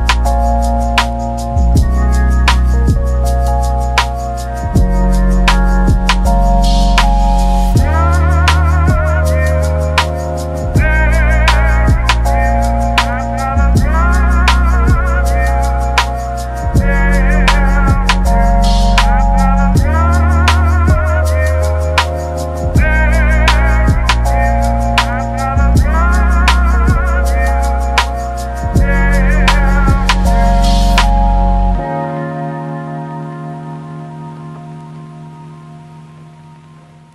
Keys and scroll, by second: 3.0 ctrl+1, 5.1 ctrl+z, 5.8 ctrl+z, 6.2 ctrl+1, 6.9 ctrl+z, 7.9 ctrl+z, 14.8 ctrl+z, 20.6-24.4 typing, 25.3 ctrl+1, 26.3 ctrl+1, 28.9 ctrl+z, 33.0-33.7 typing, 35.3 ctrl+z.